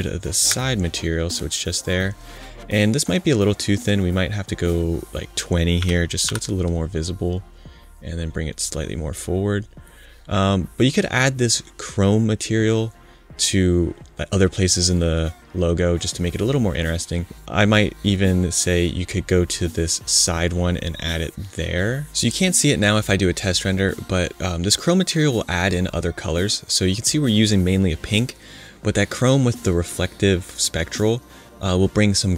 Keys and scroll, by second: 0.4 BackSpace, 5.7 2, 6.2 0.